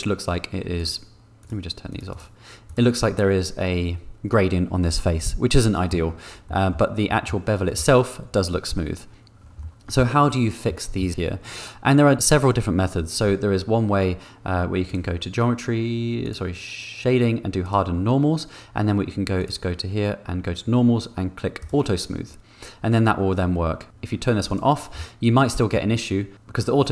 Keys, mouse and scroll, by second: 0.8-2.5 drag, 2.6 click, 5.0 middle click, 6.4 middle click, 7.2 middle click, 9.6 middle click, 10.7 middle click, 14.8 click, 16.2 click, 17.6 click, 21.6 middle click, 24.4 middle click, 24.9 middle click.